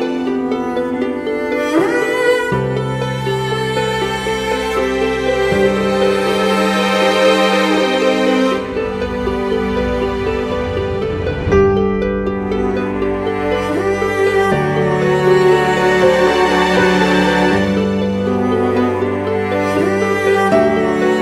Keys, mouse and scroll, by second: 11.8 ctrl+z, 17.7 right click, 19.3 ], 19.4 ], 20.9 ].